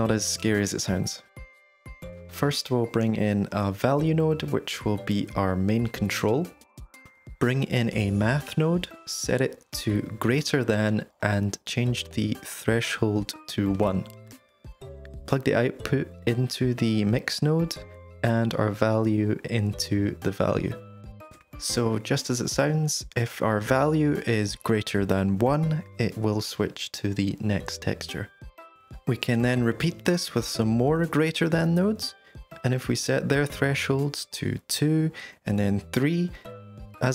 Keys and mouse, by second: 0.3-0.6 drag, 0.9 g, 2.0 click, 2.5 shift+a, 8.0 shift+a, 12.0-14.3 drag, 15.1 middle click, 16.1 middle click, 16.9 click, 19.2-20.4 drag, 21.0-21.8 drag, 22.1-28.5 drag, 28.7-30.3 drag, 30.3 middle click, 32.2 shift+d, 33.7 click, 34.4-35.2 drag, 36.1-36.6 drag.